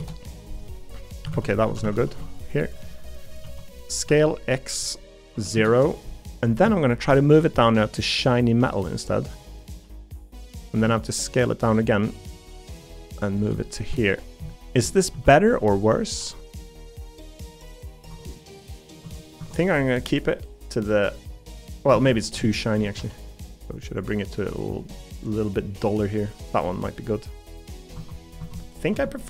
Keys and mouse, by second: 1.3 ctrl+z, 1.7 a, 1.8 a, 2.1 b, 3.3 s, 6.9 shift+middle click, 7.6 g, 9.8 g, 10.8 s, 12.5 g, 13.7 shift+middle click, 14.6 middle click, 15.1 s, 16.2 g, 18.1 Tab, 20.0-21.9 middle drag, 22.4 shift+Tab, 22.7 shift+middle click, 23.0 g, 25.2-26.5 middle drag, 27.9 Tab.